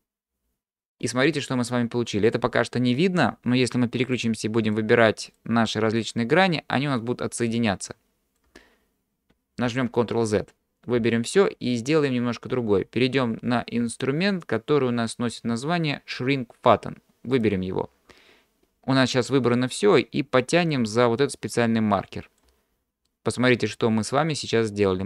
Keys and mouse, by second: 4.1 click, 5.4 click, 6.8-8.4 drag, 9.7 ctrl+z, 11.0 a, 17.4 click, 20.7-22.5 drag, 23.1-25.0 middle drag.